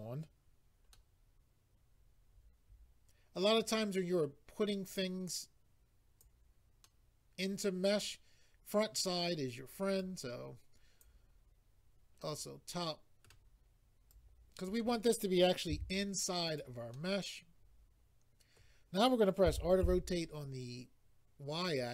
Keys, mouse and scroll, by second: 0.9 middle click, 4.8 click, 6.8 middle click, 10.0 click, 12.2 middle click, 14.1 click, 15.7 s, 16.4 click, 16.9 middle click, 19.5-19.9 typing.